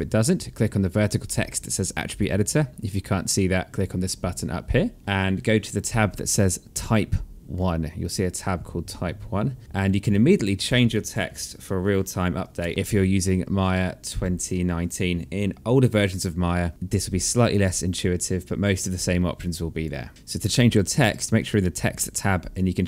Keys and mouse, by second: 2.0 click, 6.8 click, 10.2 click, 11.4-16.2 typing, 17.1 click, 19.5 alt+click, 21.0 click, 22.5 click.